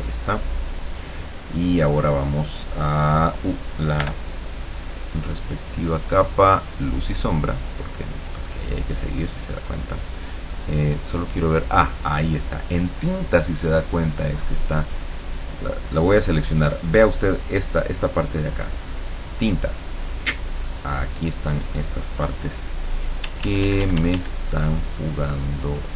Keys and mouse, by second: 0.1 click, 4.0 l, 5.7-6.7 drag, 6.9 click, 9.1 click, 11.1 click, 13.9 click, 15.7 click, 20.1 click, 23.3 d, 24.3-25.9 drag.